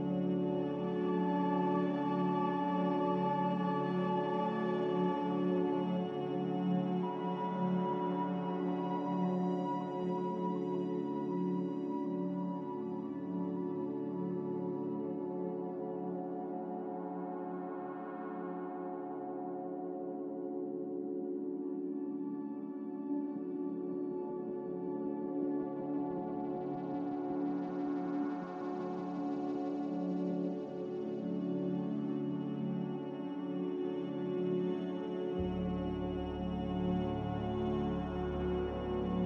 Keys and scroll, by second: 4.9 ctrl+z, 10.1 ctrl+z, 10.7 b, 14.9 z, 17.2 a, 31.0 ctrl+c.